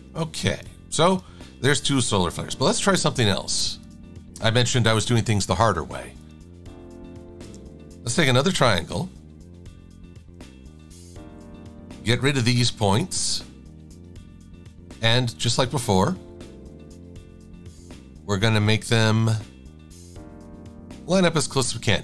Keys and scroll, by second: 7.5 KP_Enter, 11.1 -, 14.4 a.